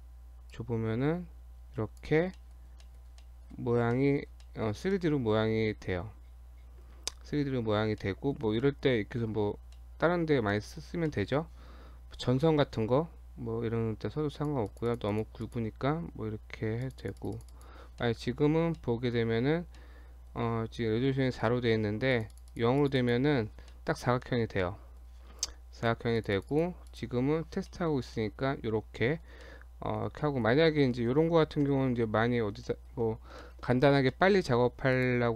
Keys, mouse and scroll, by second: 0.5 click, 2.4 middle click, 2.6-3.2 scroll up 2, 2.9 middle click, 3.2 middle click, 3.7 scroll up 2, 4.0 middle click, 4.5 middle click, 5.0 shift+middle click, 5.1 shift+middle click, 6.1 scroll down 1, 6.3-6.8 scroll up 5, 7.0-8.0 scroll down 10, 8.0 middle click, 8.6 scroll down 1, 8.7 middle click, 9.8 middle click, 10.5 middle click, 10.9 scroll down 1, 11.1 middle click, 12.5 middle click, 14.4 click, 14.7 click, 14.9 click, 15.1 click, 15.4 click, 16.8 click, 17.0-17.5 click, 17.2 click, 17.4 click, 18.0 middle click, 18.2-18.8 scroll up 4, 18.8 middle click, 19.4 scroll down 1, 19.8 middle click, 22.1 click, 22.3 click, 22.5 click, 22.8 click, 23.0 click, 23.7 middle click, 24.0 scroll down 1, 24.2 middle click, 24.6 middle click, 26.2-26.5 click, 26.4 click, 26.9 click, 27.7 middle click, 28.0 scroll down 1, 28.1 middle click, 29.5 middle click, 30.1 scroll down 1, 30.2 middle click, 30.6 scroll down 1, 30.7 middle click, 31.6 KP_7, 32.7 shift+middle click, 32.9 shift+scroll down 1, 33.4 shift+middle click, 33.6-34.0 shift+scroll down 3, 34.1 shift+middle click, 34.9 click.